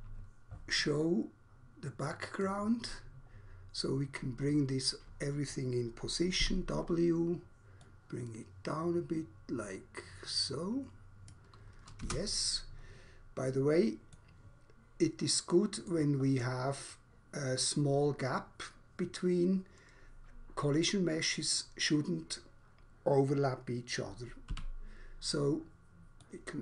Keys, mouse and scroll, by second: 2.2 click, 3.4 scroll up 1, 4.4 scroll down 1, 6.4 w, 7.9 click, 11.2 click, 12.1 space, 14.1 middle click, 15.7 middle click, 24.6 r, 26.2 click.